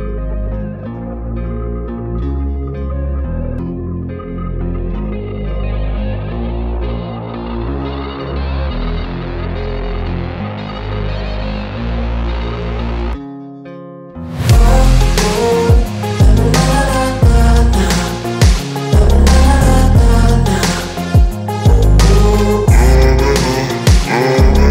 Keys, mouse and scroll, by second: 0.6 ctrl+e, 1.8-3.7 drag, 5.9 a, 17.1 click, 23.8-24.7 click.